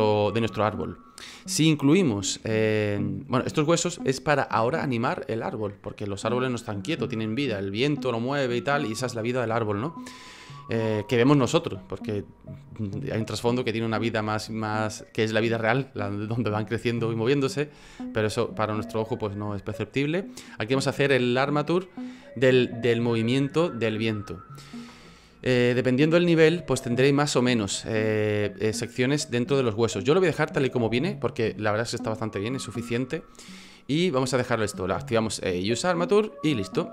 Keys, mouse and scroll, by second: 2.4 F9, 2.4-3.6 scroll down 1, 31.3 F9.